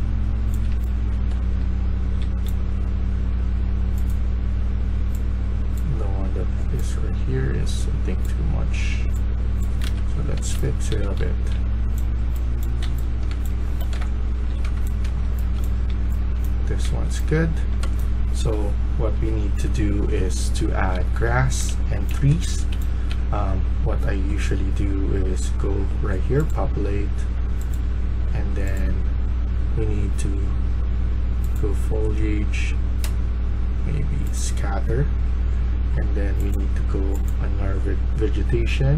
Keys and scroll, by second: 0.4-2.1 typing, 9.8 Escape, 10.0-17.8 typing, 21.2-23.6 typing.